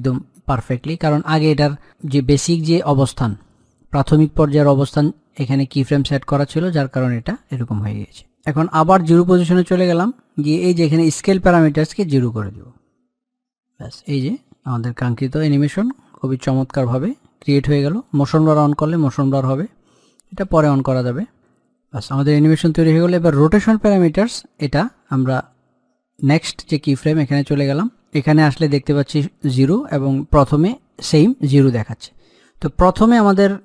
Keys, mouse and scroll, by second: 8.9-12.2 drag, 14.1-22.7 drag, 26.4 click, 30.4 click.